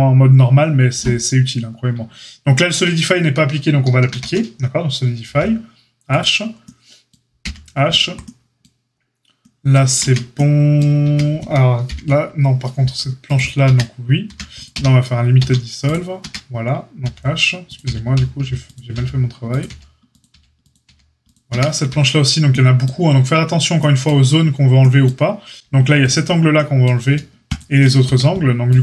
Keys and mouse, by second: 4.0 ctrl+a, 5.2 h, 7.4 h, 7.9-8.3 drag, 8.3-13.3 middle drag, 9.9 Tab, 11.0 Tab, 11.8 alt+h, 13.3 click, 13.6 Tab, 13.6-17.6 middle drag, 14.2 a, 14.7 q, 15.3 q, 16.2 Tab, 17.0-20.8 typing, 17.6 click, 17.7-20.6 middle drag, 20.6 click, 20.7-27.4 middle drag, 21.5 Tab, 27.4 alt+shift+click, 27.5-28.8 alt+shift+middle drag, 28.0 a.